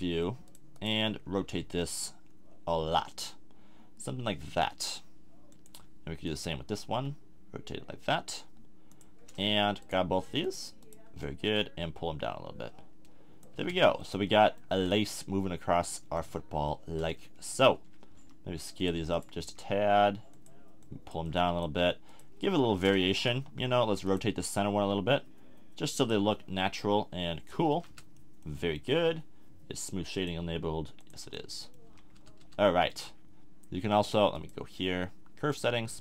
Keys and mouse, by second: 0.5 middle click, 1.6 r, 5.6 click, 6.9 r, 9.0-11.6 drag, 13.5 a, 13.7 Tab, 17.1 Tab, 17.5-18.8 middle drag, 18.2 s, 18.8-21.6 middle drag, 19.4 s, 23.3 KP_7, 24.8 r, 27.7 a, 27.9 Tab, 28.1 click, 30.1 click, 31.3-32.8 drag, 31.9 a, 32.2 Tab, 32.4 Tab.